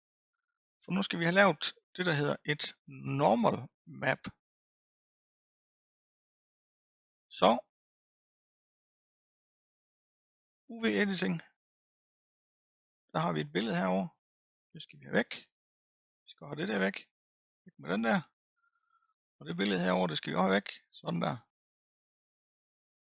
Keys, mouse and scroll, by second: 11.1 click, 17.4-23.1 drag.